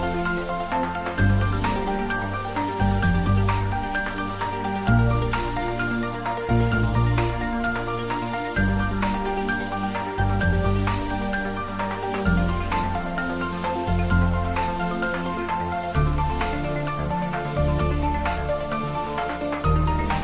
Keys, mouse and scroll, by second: 0.1 g, 0.8 click, 1.0 Tab, 2.3 ctrl+s, 2.6-5.3 middle drag, 5.3 click, 6.1 g, 7.4 click, 7.8 r, 8.5 click, 9.2 g, 9.9 click, 10.1 ctrl+s, 10.4 middle click, 10.5 middle click, 12.3 ctrl+s, 12.5 middle click, 12.9 click, 13.1 middle click, 13.4 Tab, 13.7 shift+middle click, 14.0 Tab, 14.5 ctrl+3, 15.7 middle click, 16.2 Tab, 17.0 middle click, 17.2 Tab, 17.8 click, 18.1 Tab, 18.3 click, 18.7 Tab.